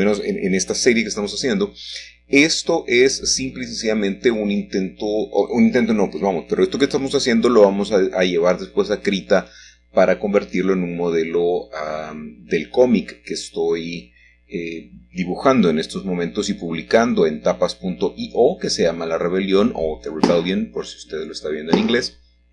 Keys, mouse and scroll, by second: 0.6 y, 3.1 click, 3.5 x, 5.1 click, 5.5 g, 6.0 shift+z, 7.4 click, 8.9 middle click, 9.7-11.2 scroll down 1, 10.2 middle click, 12.2 s, 12.5 x, 14.8 click, 15.3-16.1 scroll up 2, 16.3 shift+middle click, 17.3 shift+middle click, 17.8 shift+middle click, 18.1-18.8 scroll up 1, 18.8 shift+middle click, 19.7 shift+middle click, 20.5-21.6 shift+middle drag.